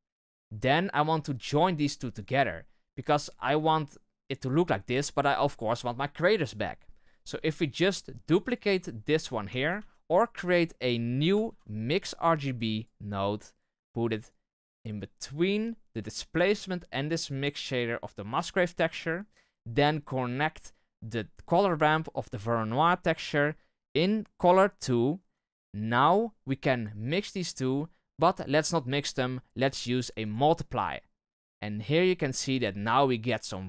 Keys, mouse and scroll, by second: 7.6 click, 30.3-31.8 drag.